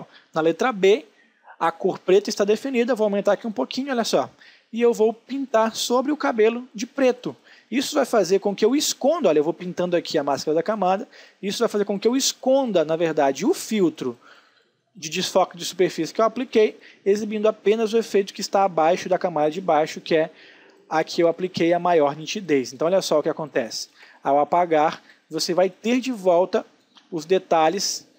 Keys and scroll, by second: 16.2 space, 23.5 space.